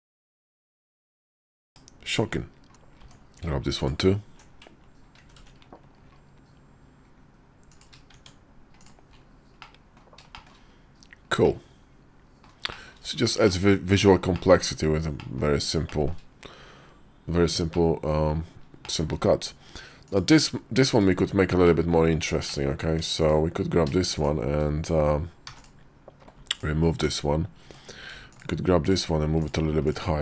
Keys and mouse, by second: 0.4 shift+middle click, 0.9 Tab, 1.5 /, 2.9 Tab, 5.1 ctrl+b, 8.0 Tab, 9.4 middle click, 10.2 middle click, 11.3 middle click, 12.6 shift+middle click, 13.3 middle click, 14.2 shift+middle click, 15.1 middle click, 15.7 shift+middle click, 17.6 middle click, 18.5 middle click, 18.7 shift+click, 20.7 /, 21.5 middle click, 22.3 middle click, 22.8 Tab, 23.1 click, 25.3 x, 26.4 alt+click, 27.5 Tab, 28.2 alt+click, 29.7 alt+click.